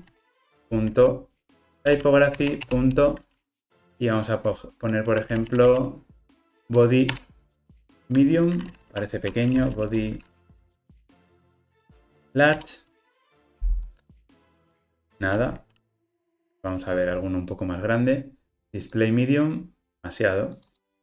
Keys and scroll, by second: 0.4 Return, 7.2 Return, 9.0 alt+shift+Left, 14.3 Return.